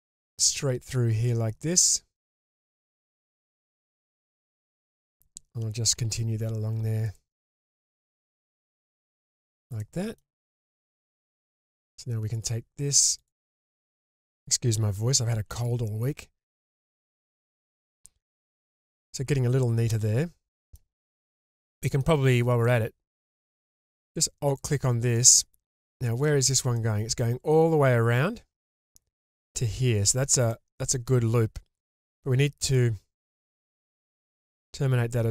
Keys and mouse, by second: 3.9 middle click, 5.9 k, 9.8-10.2 middle drag, 10.3 shift+drag, 15.3 ctrl+x, 16.2-17.2 middle drag, 17.5-20.7 middle drag, 21.1 shift+middle drag, 22.6 middle click, 26.2 shift+drag, 26.7-27.1 middle drag, 30.5 shift+middle drag, 30.9-32.7 middle drag, 33.7 alt+click, 34.3-35.3 middle drag.